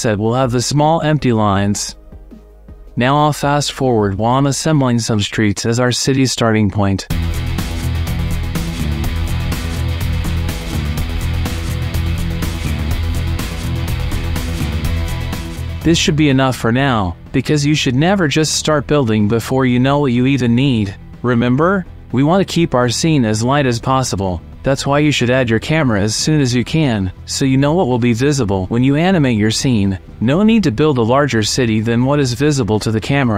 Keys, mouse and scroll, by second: 0.1 middle click, 1.0 click, 1.7 middle click, 2.7 alt+g, 2.9 middle click, 3.3-5.7 typing, 6.2 click, 6.5 middle click, 7.2 click, 7.8 alt+g, 8.0 ;, 8.3 shift+middle click, 8.7 g, 8.8 y, 9.8 click, 10.1 shift+click, 10.4 shift+middle click, 10.8 alt+d, 11.3 y, 12.4 click, 12.7 click, 12.9 alt+d, 13.1 x, 13.6 shift+click, 13.9 shift+click, 14.1 g, 14.2 x, 15.0 middle drag, 15.4 click, 15.5 middle click, 15.9 middle click, 16.1 shift+click, 27.7 click, 28.7 click, 28.9-32.8 drag.